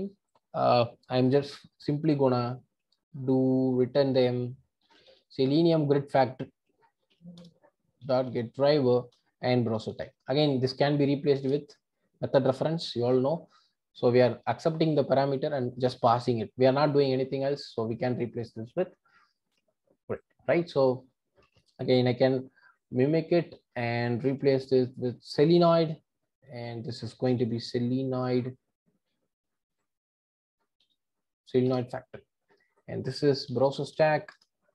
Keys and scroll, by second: 7.4 Return, 11.5 Return, 17.0 alt+Return, 31.7 Return, 34.4 Return.